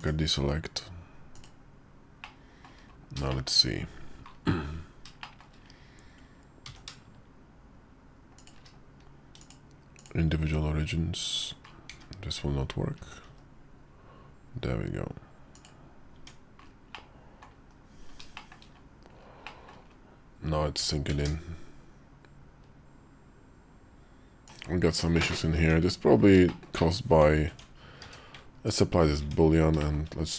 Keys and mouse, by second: 2.2 middle click, 3.2 shift+middle click, 3.5 KP_5, 5.1 shift+middle click, 6.5 e, 9.2 click, 10.3 s, 12.5 KP_5, 13.1 s, 16.0 Tab, 16.8 middle click, 17.5 KP_5, 18.2 shift+middle click, 19.3 middle click, 20.8 g, 24.4 middle click, 24.4 /, 25.0 shift+middle click, 25.4 Tab, 26.3 shift+middle click, 26.9 Tab, 27.4 Tab, 27.9 q, 29.1 Tab, 29.7 shift+click, 30.0 middle click.